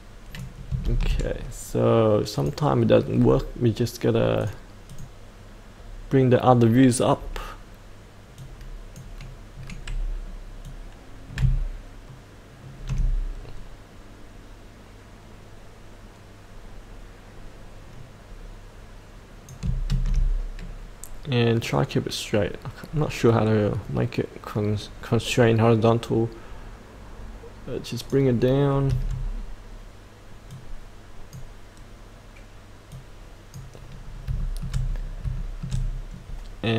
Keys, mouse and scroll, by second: 0.9 ctrl+z, 2.3 click, 3.1-4.4 scroll down 1, 4.4-9.5 drag, 9.5-10.7 scroll down 1, 10.7 click, 19.9 ctrl+z, 21.6-28.6 drag, 28.6 scroll up 1, 30.4-34.0 drag, 34.0 scroll up 1, 34.4 shift+middle click, 35.3 shift+middle click, 35.9-36.7 scroll down 1.